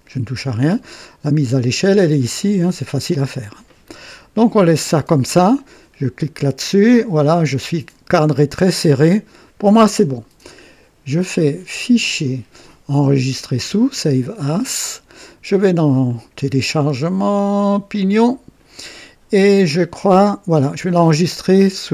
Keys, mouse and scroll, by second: 6.4 click, 12.0 click, 14.0 click, 15.9 click, 17.9 click.